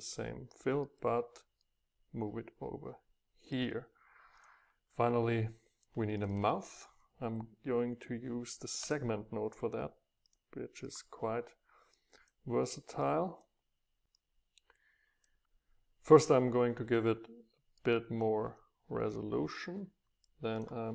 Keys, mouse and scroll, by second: 1.6 middle click, 2.3 click, 2.4 middle click, 2.5-4.4 drag, 4.4-7.7 middle drag, 7.7 click, 8.9 Return, 10.8 click, 12.0-14.1 drag, 14.3-15.5 drag.